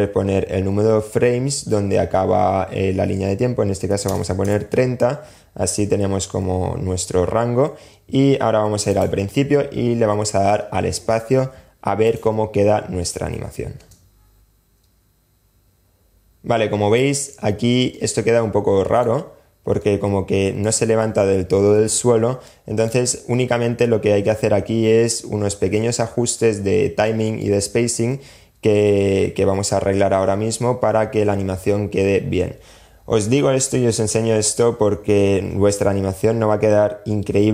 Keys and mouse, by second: 8.1 click, 11.2 click, 12.9 space, 16.3 space, 17.1-18.3 middle drag, 19.0-19.3 middle drag, 19.3-19.8 drag, 21.6 click, 26.3 click.